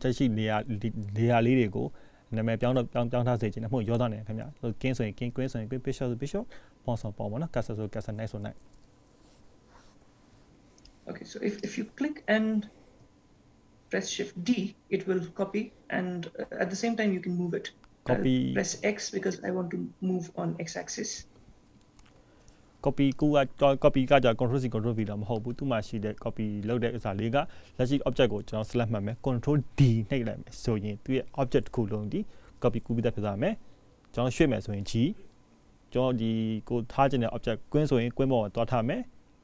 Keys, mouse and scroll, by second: 0.6 click, 10.9 click, 11.7 click, 14.4 shift+d, 25.4 click, 26.0 shift+d, 29.0 click, 30.6 shift+d.